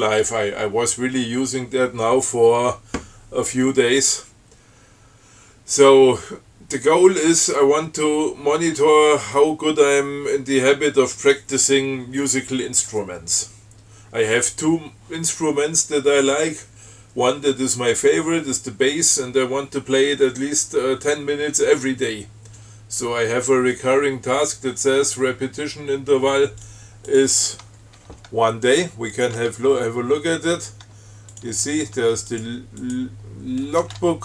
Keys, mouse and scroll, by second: 26.9 click, 27.4 click, 28.3 Tab, 29.4 click, 29.6 Tab, 31.6 click, 31.8 Tab, 32.6 click, 33.1 click, 34.1 Tab.